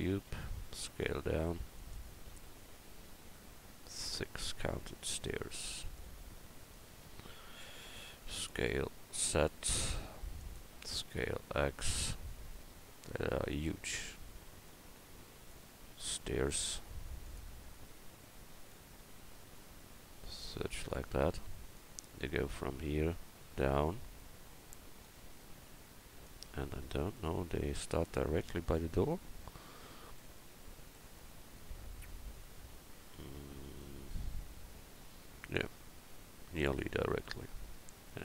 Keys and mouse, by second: 0.6 s, 2.3 s, 8.5 s, 10.8 s, 14.9-17.2 drag, 16.1 s, 18.7 click, 21.8-23.6 drag, 28.9 KP_1.